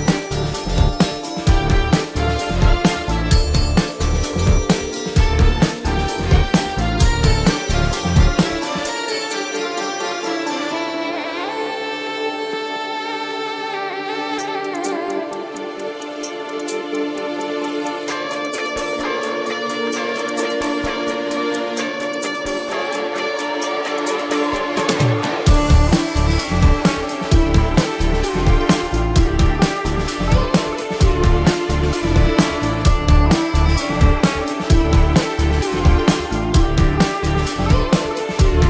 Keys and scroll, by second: 2.3 space, 3.9 ctrl+alt+z, 6.3 ctrl+alt+z, 7.7 space, 8.1 space, 8.9 ctrl+alt+z, 10.5 space, 11.3 space, 11.9 ctrl+=, 12.0 space, 14.9 space, 17.4 ctrl+alt+z, 18.2 ctrl+alt+z, 18.3 ctrl+=, 18.7 ctrl+=, 21.4-24.0 typing, 21.8 ctrl+-, 22.3 ctrl+alt+z, 24.7 ctrl+-, 25.0 ctrl+alt+z, 25.6 ctrl+-, 25.8 space, 26.1 ctrl+-, 26.3 ], 27.6 ctrl+=, 28.1 ctrl+=, 28.5 ctrl+=, 28.6 space, 29.1 ctrl+=, 30.1 ctrl+-, 30.4 ctrl+alt+z, 30.6 ], 31.0 ], 32.1 ], 32.9 space, 35.6 ctrl+alt+z, 35.9 ctrl+=, 36.5 ctrl+-, 37.0-38.6 typing, 37.1 ctrl+-.